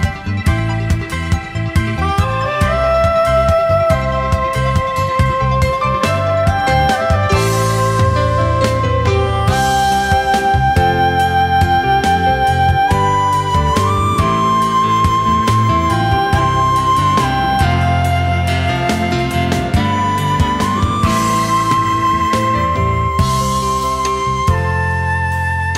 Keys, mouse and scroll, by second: 12.2-12.8 alt+scroll up 1, 12.9 space, 17.4-17.7 alt+scroll down 1.